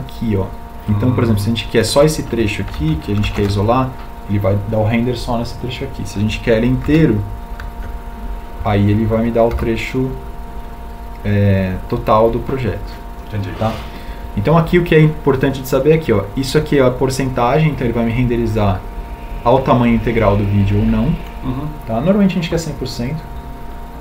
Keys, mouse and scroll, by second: 3.2 ctrl+alt+shift+l, 6.6 alt+1.